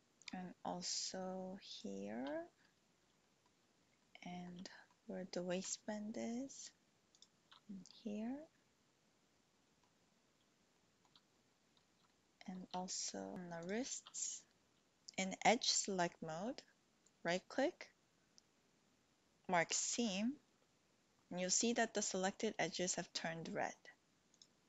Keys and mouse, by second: 3.2 shift+click, 4.0 click, 4.7 shift+click, 7.9-9.8 drag, 10.7 shift+middle click, 12.0 shift+click, 13.4 alt+shift+click, 17.3-20.0 drag.